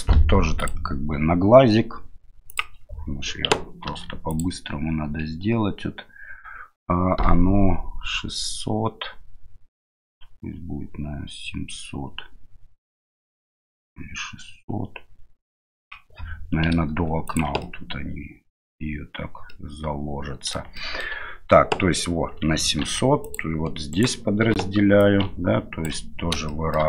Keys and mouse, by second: 0.6-2.8 drag, 3.9 ctrl+r, 17.7-18.8 middle drag, 19.5-20.6 middle drag, 20.8 shift+middle click, 22.8 ctrl+r, 25.1 ctrl+click, 26.5 shift+middle click.